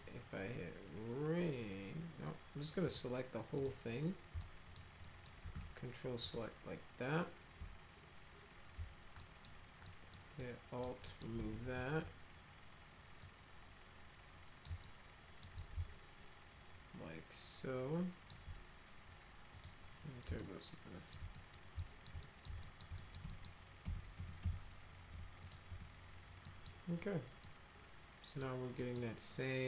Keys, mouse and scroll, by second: 2.8 click, 3.5 click, 4.4 alt+middle click, 5.0 alt+middle click, 6.2 ctrl+click, 9.2 alt+middle click, 9.8 alt+middle click, 10.4 alt+click, 11.0 alt+middle click, 11.6 w, 13.2-14.7 drag, 14.8 alt+middle click, 15.6-18.3 alt+middle drag, 19.5 click, 20.4 alt+middle click, 21.3 middle click, 21.8 alt+middle click, 22.2 middle click, 22.6 alt+middle click, 23.0 middle click, 23.3 middle click, 23.8 F3, 24.1 F3, 24.4 F4, 25.1 F4, 25.4 click, 25.7 F4, 26.4 middle click, 27.4 middle click, 28.8 middle click.